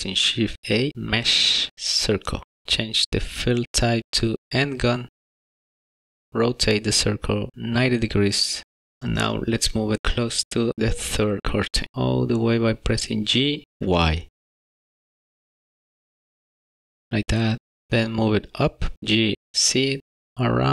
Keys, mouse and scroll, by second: 0.2 shift+a, 4.8 click, 10.0 middle click, 10.2 shift+middle click, 10.9 y, 13.1 g, 15.0-15.4 scroll up 4, 15.2 middle click, 15.8 g, 16.8 middle click, 17.1 g, 18.2 z.